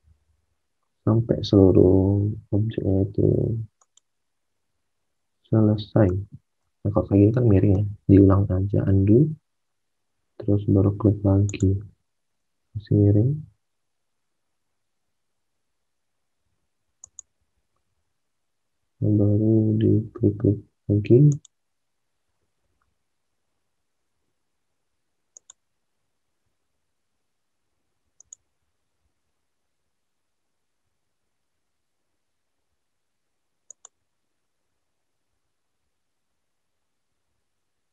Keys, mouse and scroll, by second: 7.7 ctrl+z, 12.4 ctrl+z, 22.3 ctrl+z, 26.4 ctrl+z.